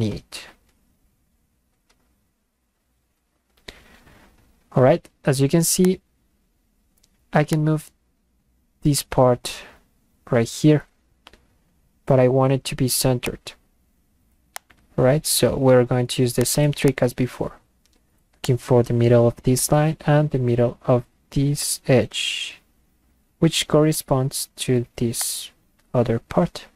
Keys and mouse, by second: 2.2 Return, 5.8 click, 7.6-12.4 drag, 13.2 click, 14.5 click, 16.4 click, 16.9 click, 18.5 click, 25.2 click.